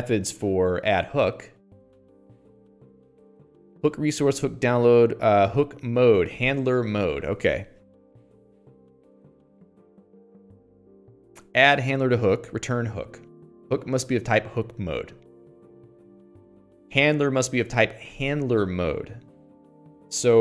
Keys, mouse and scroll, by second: 3.0-4.1 scroll down 4, 4.9-6.5 scroll down 7, 17.7-18.0 scroll up 10.